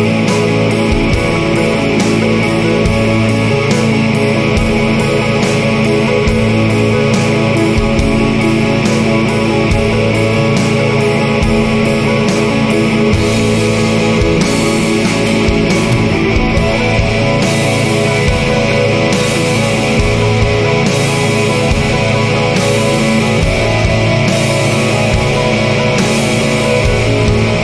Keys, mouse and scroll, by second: 1.2 click, 2.3 click, 3.4 BackSpace, 4.6 y, 5.8 0, 7.1 shift+8, 7.8 5, 8.1 0, 9.5 click, 10.5 scroll down 1, 11.3-11.7 scroll down 1, 12.6 click, 14.2 click, 15.2-19.7 typing, 21.9 click, 23.9 click, 25.3 click, 26.5 click, 27.2-27.6 typing.